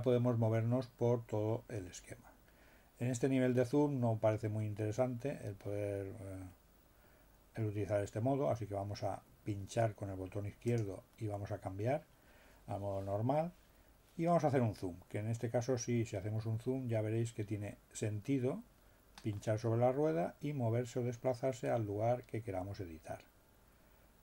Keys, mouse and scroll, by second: 10.7 click, 15.6 scroll up 2, 17.0 scroll up 2, 19.4 middle click.